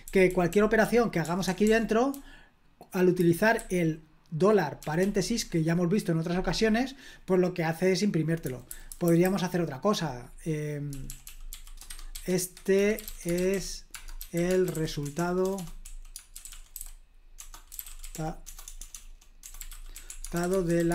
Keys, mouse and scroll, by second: 0.0-5.2 typing, 8.4-9.2 typing, 10.6-20.9 typing.